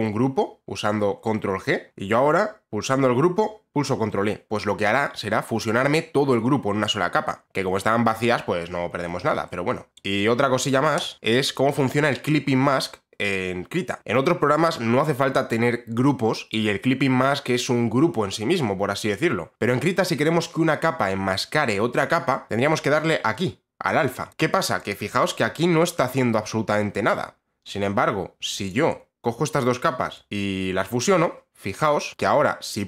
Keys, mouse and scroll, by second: 1.6 click, 2.8 ctrl+e, 7.4 ctrl+z, 7.8 ctrl+z, 8.5 ctrl+z, 8.7 ctrl+z, 8.9 ctrl+z, 10.6 shift+click, 19.4 shift+click, 22.5 click, 24.0 click, 24.3 click, 24.5 click, 28.1 click, 28.3 shift+click, 29.6 ctrl+g, 31.4 click, 32.0 click.